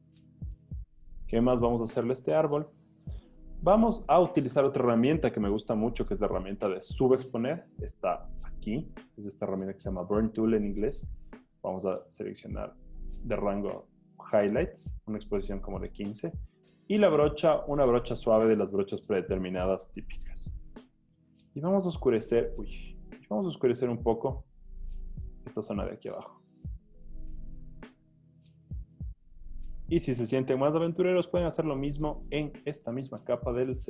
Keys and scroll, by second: 0.8 z, 0.8 z, 22.7 super+z, 27.7 z, 30.0 z, 33.3 o.